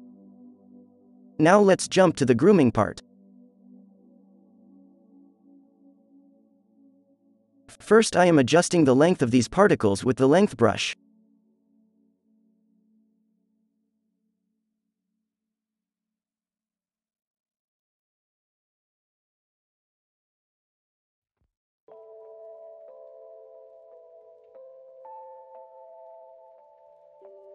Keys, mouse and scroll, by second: 0.9 f, 1.8 click, 2.2 f, 2.8 ctrl+z, 3.0 ctrl+z, 3.6 ctrl+z, 3.6-4.4 middle drag, 5.3 f, 6.2-10.4 drag, 6.6 f, 7.4 f, 8.9 f, 9.5 f, 12.4 click, 13.6 f, 14.4-16.3 drag, 16.0 f, 16.3 f, 17.2 f, 18.7 f, 19.5 f, 19.8-21.1 drag, 19.8 f, 21.2 f, 21.4 click, 21.7 f, 22.8 f, 22.8-24.0 drag, 24.3 f, 24.9 f, 25.9 f, 26.6 f.